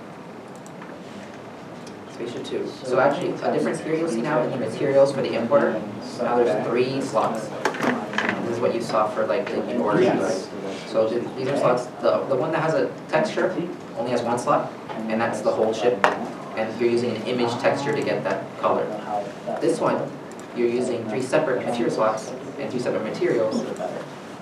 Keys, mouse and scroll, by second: 5.5 alt+Tab, 5.5-5.9 scroll down 1, 13.8 scroll down 1, 20.2 scroll down 1, 24.0 middle click, 24.3-24.4 scroll down 1.